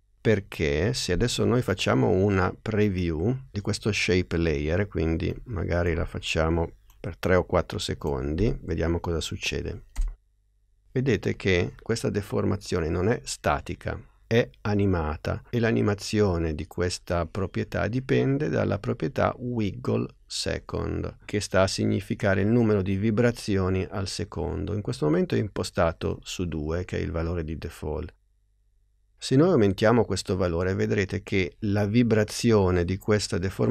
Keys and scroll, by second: 8.4 n, 10.0 space.